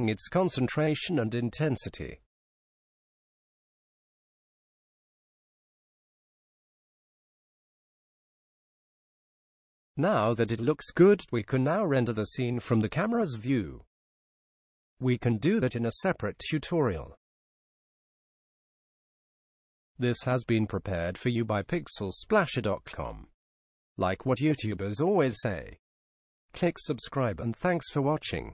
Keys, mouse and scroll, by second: 11.1 click, 28.0 click.